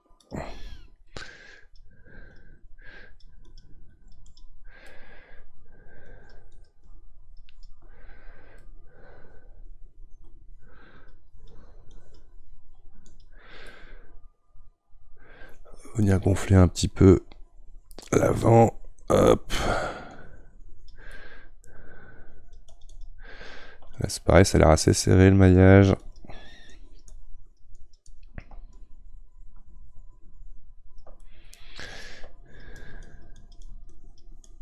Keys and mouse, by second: 4.9-6.0 middle drag, 6.0-8.6 drag, 8.6-11.0 middle drag, 11.0-13.7 drag, 13.7-16.1 middle drag, 16.1-21.1 drag, 21.1-22.3 middle drag, 22.3-31.2 drag, 31.2-32.4 middle drag, 32.4-34.6 drag.